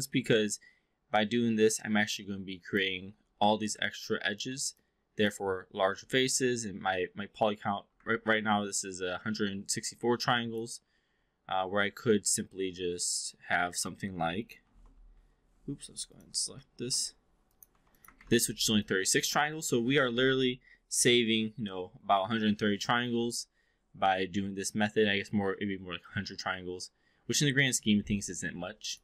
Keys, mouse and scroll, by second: 4.8-5.3 alt+drag, 8.0 ctrl+a, 10.2-10.6 alt+drag, 11.0 4, 13.1 click, 14.6 shift+i, 16.0 click, 16.6 shift+i, 17.4 click, 17.7 3, 18.0 click, 18.1 ctrl+a, 18.8-19.7 alt+drag, 28.7 click.